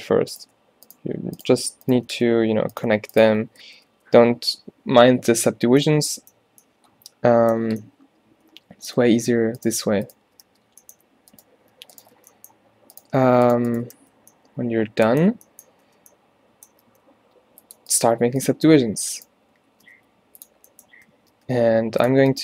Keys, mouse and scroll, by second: 2.2 f, 3.7 f, 4.0 f, 9.7 f, 10.5 f, 12.2 f, 14.0 f, 16.0 f, 16.9 ctrl+r, 18.7 g, 19.7 shift+Tab, 20.0 g, 21.2 shift+Tab, 21.5 g.